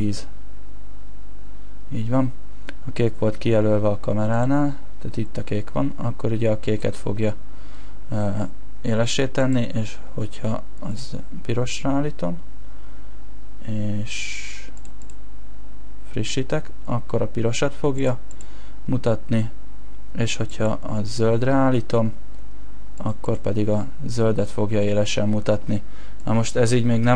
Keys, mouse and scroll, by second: 11.0 click.